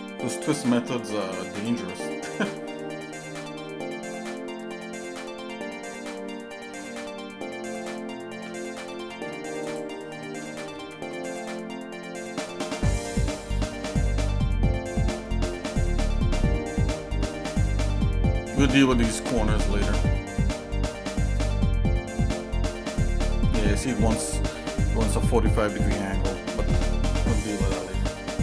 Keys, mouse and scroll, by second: 7.8 click, 8.9 ctrl+b, 10.8 ctrl+b, 12.6 middle click, 13.2 scroll down 2, 13.7 middle click, 14.2 middle click, 15.2 middle click, 16.1 middle click, 16.8 middle click, 17.2 middle click, 19.6 middle click, 20.1 middle click, 21.3 click, 21.6-26.0 drag, 26.5 ctrl+z, 26.6 middle click.